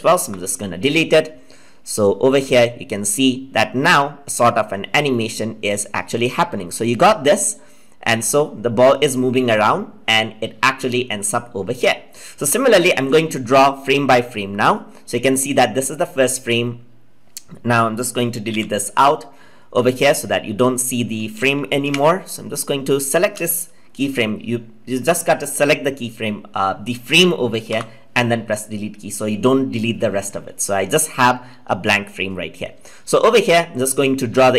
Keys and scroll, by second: 21.8 ctrl+z.